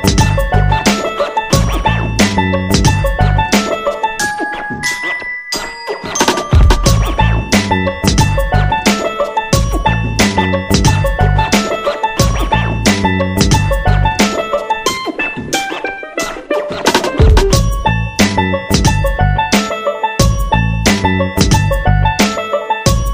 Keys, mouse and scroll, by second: 6.2 scroll down 1, 7.0-21.1 drag.